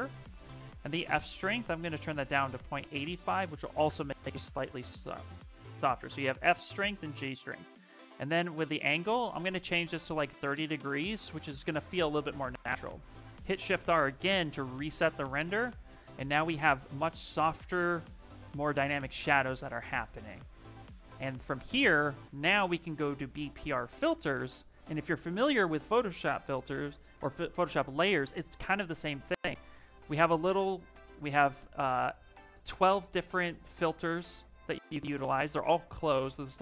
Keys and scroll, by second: 13.3 shift+r, 30.7 shift+m.